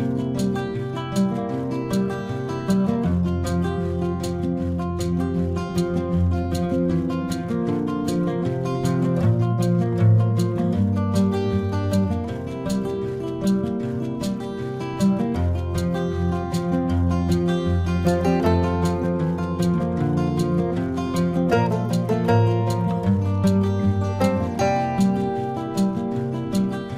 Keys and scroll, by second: 0.5 ctrl+alt+z, 1.4 space, 2.7 space, 3.9 space, 7.5 ctrl+-, 8.4 ctrl+=, 9.3 space, 12.1 ctrl+-, 12.9 ctrl+alt+z, 14.7 ctrl+-, 18.8 ctrl+alt+z, 19.7 ctrl+-, 20.3 ctrl+alt+z, 20.8 ctrl+alt+z, 21.7 space, 22.2 ctrl+-, 24.0 space.